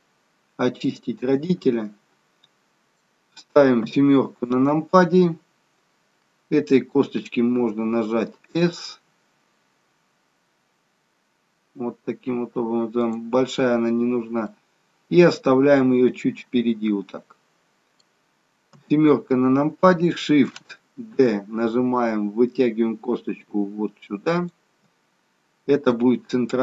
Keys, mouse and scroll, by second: 1.6 middle click, 3.7 KP_7, 7.6 s, 14.5 middle click, 18.8 KP_7, 21.1 shift+d, 25.9 middle click.